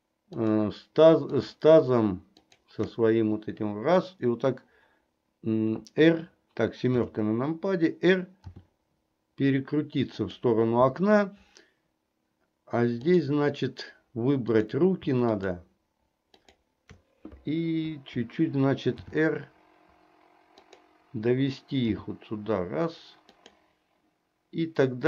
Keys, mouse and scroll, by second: 0.4 shift+click, 2.5 shift+click, 7.1 KP_7, 8.6 r, 13.2 click, 15.4 shift+click, 16.4 shift+click, 19.1 r, 22.0 g.